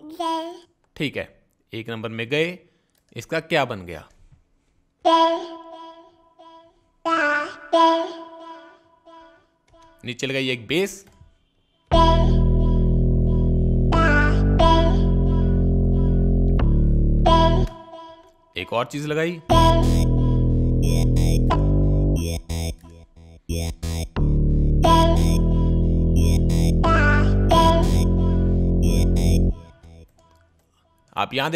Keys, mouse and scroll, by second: 0.1 click, 1.6 click, 3.6 click, 8.3-10.0 right drag, 10.1 right click, 13.6 click, 15.8 click, 17.5-18.0 right drag, 18.3 right click, 22.7 right click.